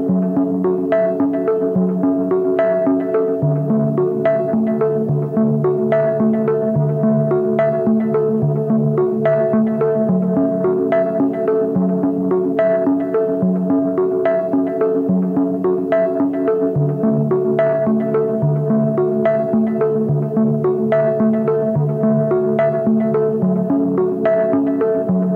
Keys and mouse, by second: 0.3 e, 1.2 click, 2.1 a, 2.3 b, 3.1-4.9 drag, 5.1 ctrl+r, 12.9 2, 13.3-14.5 drag, 15.2 z, 15.5-16.1 drag, 21.0 drag, 22.3 KP_1, 23.2 shift+click, 23.8-25.3 drag.